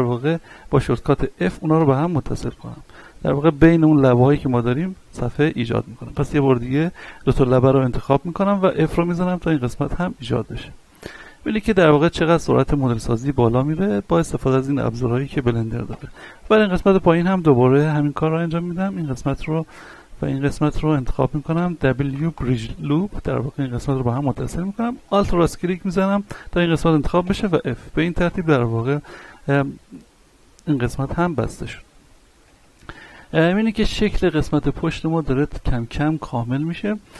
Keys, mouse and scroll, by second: 1.8 click, 4.4 right click, 5.6 ctrl+z, 7.5 right click, 8.1 shift+right click, 8.8 f, 9.7-10.1 scroll down 1, 10.1 middle click, 11.1 Tab, 11.6-13.0 middle drag, 13.0 scroll up 1, 13.4 shift+middle click, 15.2 right click, 15.9 Tab, 16.8 click, 17.2 middle click, 18.2 right click, 18.9 shift+right click, 19.6 scroll up 1, 20.2 shift+right click, 21.5 w, 22.3 click, 23.2-25.0 middle drag, 25.0 alt+right click, 27.2 f, 28.2 Tab, 28.6-32.1 middle drag, 32.1 scroll down 1, 32.7 shift+middle click, 33.6-34.8 middle drag, 35.6 a, 36.3-36.9 middle drag.